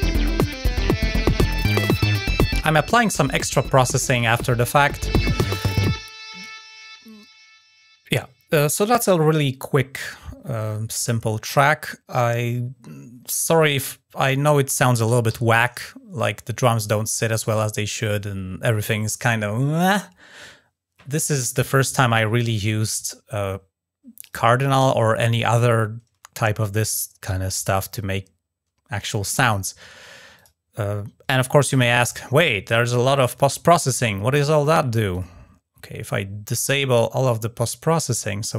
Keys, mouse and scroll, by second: 1.5 click, 6.6 scroll down 2, 8.0 scroll up 2, 24.0 click, 24.1 click, 30.1 click, 31.5 click, 34.4 click, 34.9 click, 36.7-37.1 scroll down 2, 37.3 right click, 38.2 click.